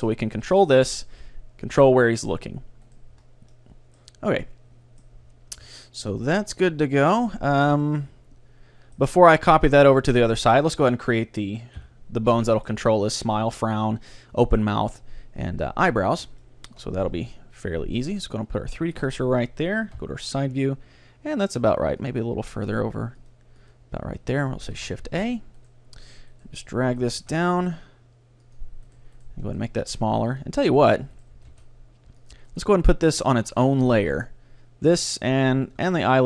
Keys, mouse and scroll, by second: 0.1 middle click, 0.5-1.9 right drag, 0.7-1.9 drag, 0.9 g, 1.9 middle click, 3.1 right click, 3.3 middle click, 3.3-4.6 right drag, 3.7 click, 4.6 middle click, 5.3 middle click, 7.7 a, 7.9-9.9 middle drag, 10.1-11.8 middle drag, 11.8 KP_3, 12.5-14.3 middle drag, 16.5-18.4 middle drag, 17.1 Tab, 19.0-20.8 drag, 20.0 KP_1, 22.1-25.5 drag, 24.8 shift+a, 25.7-28.1 right drag, 27.1 g, 28.7-30.3 drag, 29.0-34.3 right drag, 29.7 ctrl+alt+s, 31.4 g, 32.4-34.1 drag, 33.0-36.2 middle drag, 36.0-36.2 right drag.